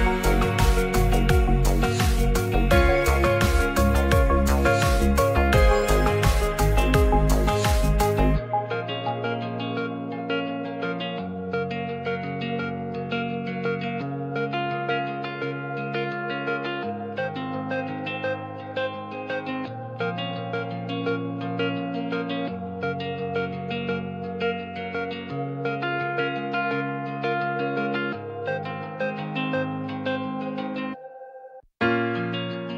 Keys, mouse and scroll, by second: 1.2 click, 3.3 c, 3.9 shift+d, 6.7 click, 7.3 click, 9.1 click, 9.7 click, 10.7 click, 11.3 click, 12.2 shift+middle click, 15.1 click, 15.7 click, 16.2 click, 18.7 click, 19.8 c, 20.7 shift+d, 23.0 click, 24.0 shift+middle click, 24.8 click, 26.7 Tab, 27.0-27.3 middle drag, 27.8 alt+z, 28.0-28.6 drag, 29.2 shift+middle drag, 30.4 shift+middle click, 31.0 Tab, 31.7 c, 32.3 alt+z.